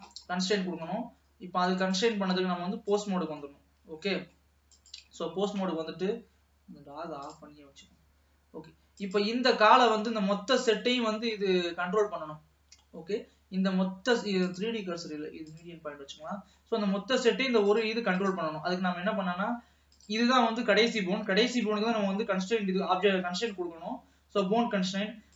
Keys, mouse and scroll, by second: 0.4-1.0 scroll up 1, 1.0 ctrl+s, 2.0-3.5 drag, 3.5-4.2 scroll up 3, 4.2 middle click, 4.9 click, 7.3 click, 9.0 click, 9.7-11.3 scroll down 3, 11.3-14.5 middle drag, 14.5-16.4 drag, 16.4-17.7 middle drag, 17.7 click, 18.2 click, 20.0 click, 23.5 click.